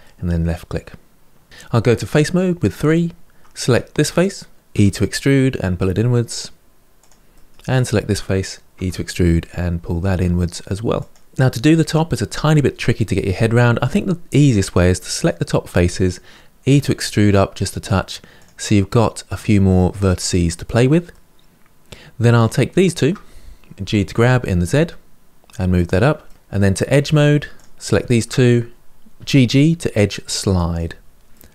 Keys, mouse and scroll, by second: 2.5 3, 3.4 click, 4.5 e, 7.1 middle click, 7.5 click, 8.5 e, 14.3 click, 16.4 e, 20.8-22.2 middle drag, 22.2 click, 22.6 shift+click, 23.6 g, 26.0 middle click, 26.8 2, 27.3 click, 27.8 shift+click, 28.9 g, 31.0-31.5 middle drag.